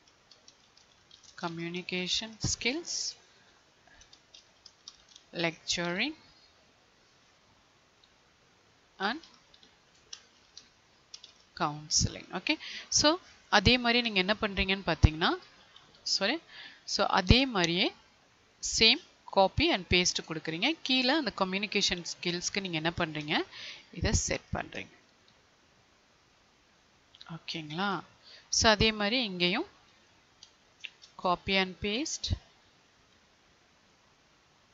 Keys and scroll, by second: 1.2 space, 2.6 Tab, 5.3 Tab, 7.5 Tab, 16.1 ctrl+z, 19.3 ctrl+c, 27.7 Left, 29.8 Left.